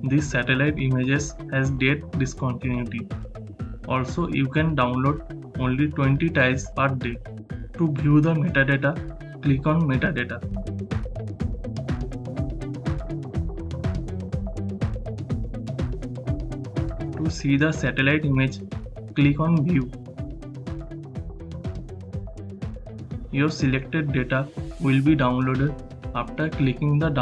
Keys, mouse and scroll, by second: 8.8 click, 11.5 click, 11.6-18.4 drag, 23.3 click, 23.5 click, 25.7 click, 26.7 right click, 26.8 click, 26.9 click.